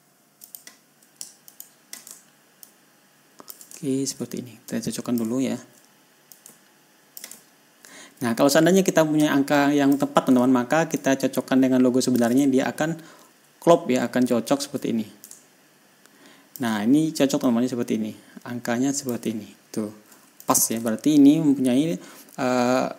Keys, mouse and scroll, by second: 0.9 click, 1.9 shift+click, 3.1-4.1 ctrl+drag, 4.2 ctrl+scroll up 2, 5.1 click, 5.8 ctrl+scroll down 2, 6.8-7.8 ctrl+drag, 7.8 ctrl+scroll up 1, 8.7-10.5 ctrl+drag, 11.4-12.8 ctrl+drag, 12.9-13.2 ctrl+scroll down 2, 13.2 ctrl+scroll up 2, 15.7-17.2 ctrl+drag, 17.9-19.7 drag, 20.1 ctrl+scroll up 2, 20.8 ctrl+click, 21.2 ctrl+scroll down 1, 22.2-22.5 ctrl+scroll up 1.